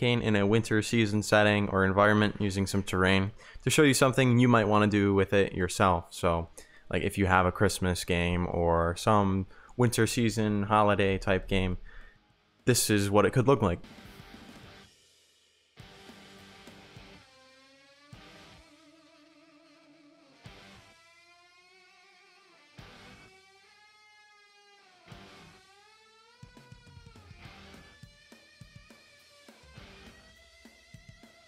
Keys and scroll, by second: 2.3 e, 2.4 w, 4.3 d, 4.5 w, 7.1 a, 8.8 s, 9.2 w, 9.9 s, 12.8 w, 13.5 s, 16.0 d, 17.8 d, 19.1 a, 20.8-22.5 typing, 23.8-25.1 typing, 26.4 a, 27.2 d, 28.6 w, 29.1 q, 29.9 w, 31.3 d.